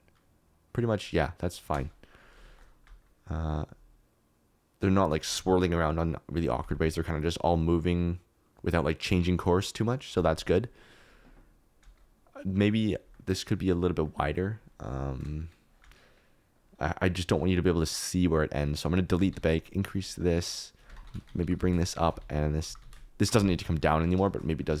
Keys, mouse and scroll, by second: 2.3 shift+space, 2.8 space, 12.1 space, 12.5 click, 13.1 click, 14.0 click, 14.3-17.2 middle drag, 15.2 space, 15.8 space, 17.3 middle click, 17.8 middle click, 19.1 s, 19.3 x, 20.9 Tab, 21.0 3, 21.3 g, 21.5 z, 22.2 alt+z, 22.4 click, 22.6 g, 22.7 z, 23.4 Escape, 23.6 middle click, 24.2 shift+middle click, 24.6-24.8 middle drag.